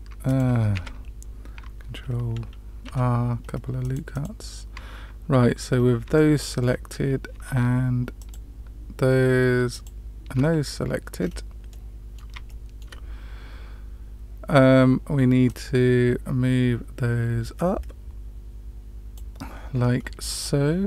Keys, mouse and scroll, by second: 0.7 ctrl+z, 2.8 ctrl+r, 5.6 scroll up 2, 6.1 shift+middle click, 8.1 alt+shift+click, 9.7 alt+shift+click, 11.1 scroll down 2, 11.6 middle click, 12.4 shift+middle click, 15.4-19.1 drag.